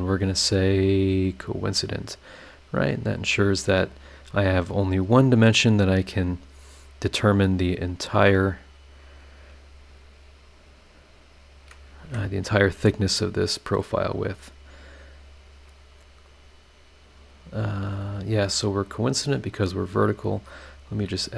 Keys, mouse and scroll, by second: 1.5 click, 2.1 click, 4.0-4.4 scroll down 4, 5.7-6.6 scroll up 6, 9.2 click, 10.5 click, 11.6 click, 12.0 Escape, 12.5 scroll down 1, 14.1 click, 15.4 click, 17.4 click, 18.8-20.1 drag, 20.6 click, 20.9 scroll down 1.